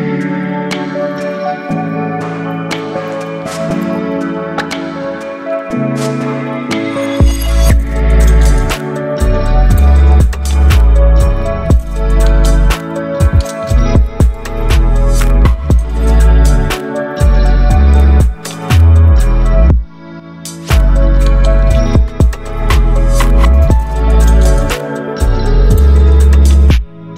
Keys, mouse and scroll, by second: 4.1 ctrl+0, 6.3 shift+click, 7.2-10.9 drag, 12.6 ctrl+0.